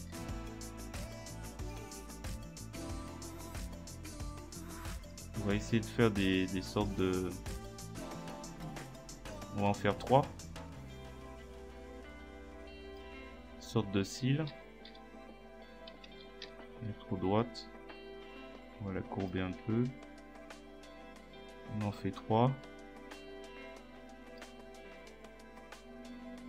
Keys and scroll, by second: 0.0 ctrl+z, 14.1 ctrl+z, 16.1 ctrl+z.